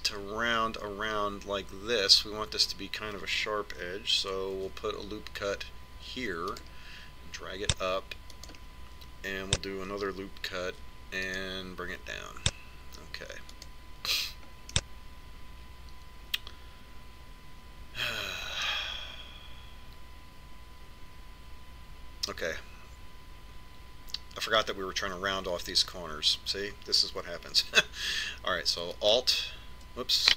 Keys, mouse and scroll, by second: 5.7 ctrl+r, 11.8 ctrl+r, 15.9-17.7 middle drag, 30.2 right click.